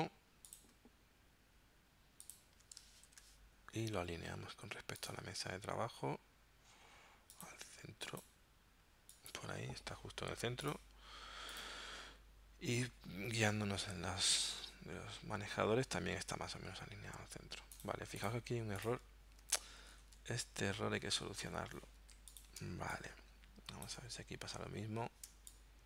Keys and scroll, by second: 3.1 super+g, 18.2 z, 23.0 space, 25.3 space.